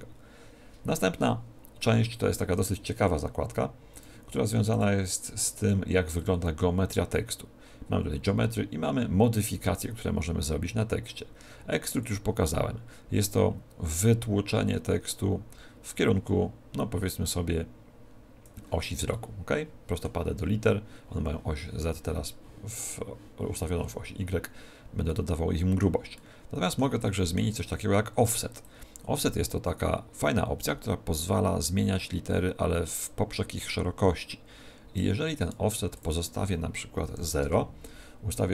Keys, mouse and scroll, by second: 1.8 middle click, 3.9 click, 4.6 click, 12.0 click, 19.0 middle click, 25.0 middle click, 26.1 middle click, 28.6 click, 35.9 click.